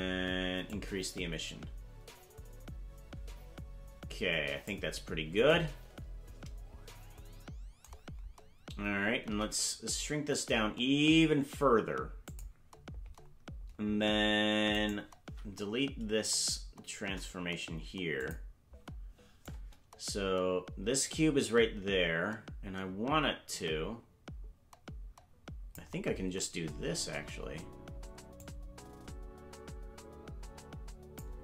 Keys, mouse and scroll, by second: 0.6-4.7 drag, 9.2 s, 14.7 right click, 17.0 Delete, 19.5-25.6 drag, 26.0-27.1 scroll down 7, 28.4-31.2 drag.